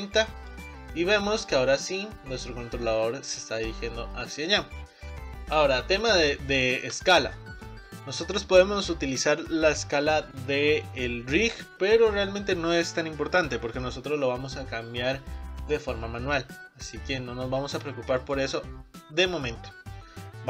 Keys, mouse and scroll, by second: 1.0-4.0 middle drag, 5.1 click, 5.6-6.1 scroll up 2, 6.1-16.4 middle drag, 16.4 s, 16.5 s, 19.9 scroll down 1.